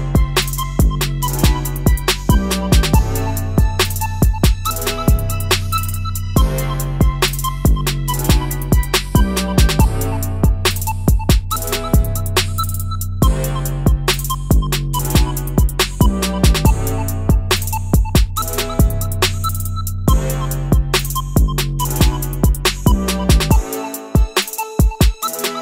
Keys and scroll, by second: 0.3 Down, 0.4 Down, 0.4-1.0 Down, 1.2 Up.